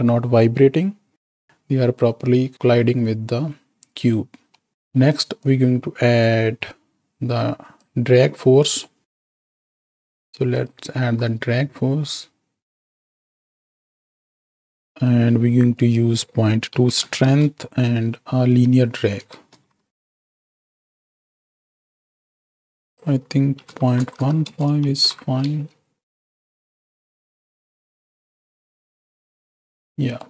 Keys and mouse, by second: 2.5 click, 4.5 middle click, 4.8 middle click, 5.6-7.9 drag, 9.5 middle click, 10.9 shift+d, 13.5 alt+p, 13.6 click, 14.8 click, 14.8 right click, 15.8-17.2 drag, 19.5 shift+Right, 19.7 shift+Left, 20.0 space, 20.4 click, 22.5 space, 22.9-24.5 drag, 24.9 shift+Right, 25.0 shift+Left, 25.4 space, 26.8-30.2 middle drag.